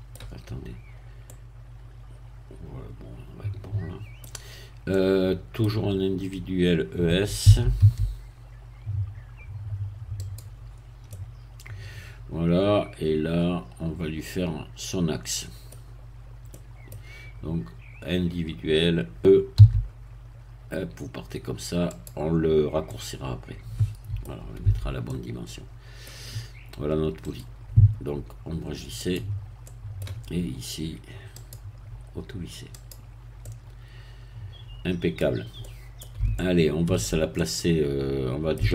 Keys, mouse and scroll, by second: 4.5 scroll up 1, 4.8 middle click, 7.4 e, 7.7 s, 10.1 click, 10.6 scroll down 2, 11.0-15.8 middle drag, 15.8-16.2 scroll down 2, 16.4 middle click, 19.6 e, 21.9 click, 22.9-24.6 middle drag, 24.6 Tab, 25.0-26.2 middle drag, 27.2 right click, 29.0 click, 29.6 middle click, 31.4 click, 32.7 click, 33.4-38.7 middle drag.